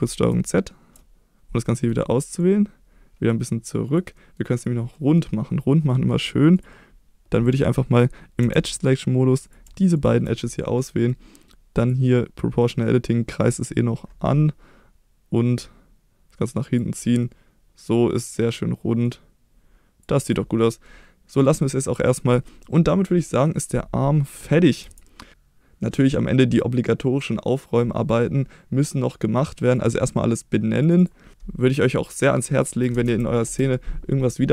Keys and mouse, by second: 0.1 ctrl+z, 1.6 middle click, 2.4-3.9 drag, 4.2 middle click, 4.5 click, 4.9 middle click, 5.9 middle click, 6.5 click, 9.6 shift+2, 10.0 click, 11.8 click, 12.6 middle click, 13.4-16.8 drag, 17.2-18.4 middle drag, 19.1 click, 20.2 click, 20.6 middle click, 24.8 Tab, 25.3-25.9 middle drag, 29.7 click, 31.0-34.0 drag, 31.3 BackSpace.